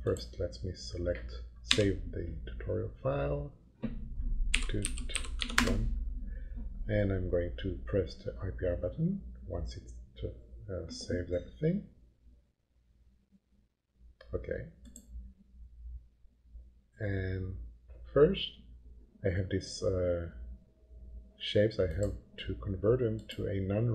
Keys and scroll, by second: 1.6 s, 4.3-5.8 typing.